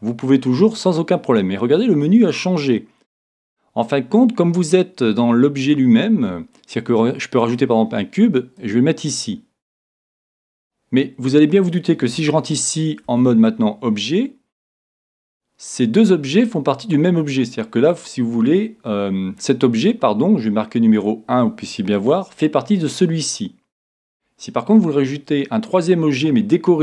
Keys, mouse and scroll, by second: 8.6-10.5 drag, 10.6-12.5 middle drag, 13.1 Tab, 14.1-16.0 middle drag.